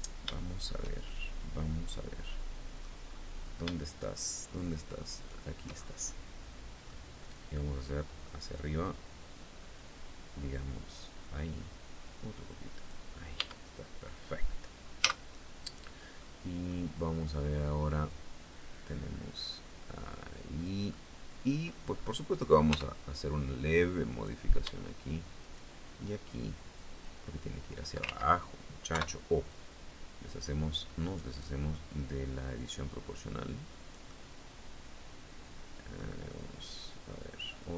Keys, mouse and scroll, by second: 0.6 shift+middle click, 0.9 scroll up 2, 1.2-2.6 scroll down 2, 2.6-3.2 scroll up 2, 3.4 shift+middle click, 3.4 shift+scroll up 2, 4.7 shift+right click, 5.3 shift+scroll down 2, 5.6-6.6 shift+middle drag, 8.1-10.7 drag, 10.7 scroll down 2, 13.0 Tab, 13.4-14.2 scroll down 1, 14.6 z, 15.8 middle click, 16.8 middle click, 18.3-20.4 drag, 20.5 middle click, 21.5-21.9 scroll up 1, 21.9 right click, 22.2 Tab, 23.6 right click, 25.0 shift+right click, 26.6-27.8 drag, 27.6 ctrl+z, 28.4 o, 29.0-31.4 drag, 32.1-35.7 drag, 36.0-37.1 drag, 37.3 click.